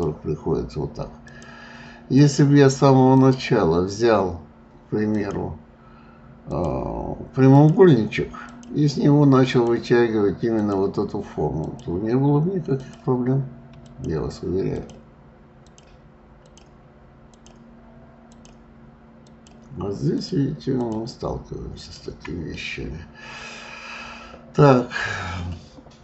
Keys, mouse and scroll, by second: 1.3 shift+click, 2.1 shift+click, 3.1 shift+click, 5.0 shift+click, 6.5 shift+click, 7.4 shift+click, 8.4 shift+click, 9.4 shift+click, 10.6 shift+click, 11.6 shift+click, 12.8 shift+click, 13.9 shift+click, 14.7 shift+click, 15.6 shift+click, 16.3 shift+click, 17.3 shift+click, 18.3 shift+click, 19.3 shift+click, 20.1 shift+click, 20.8 shift+click, 21.8 shift+click, 22.5-25.6 middle drag.